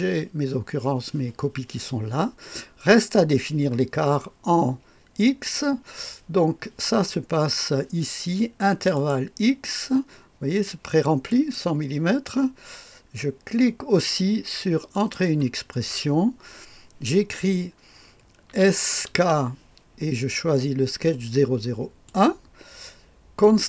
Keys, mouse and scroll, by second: 7.1-8.9 scroll down 1, 8.9 click, 11.2 click, 14.9 click, 18.5-19.1 typing, 22.1 click, 22.7 click, 22.8 click, 23.4 click.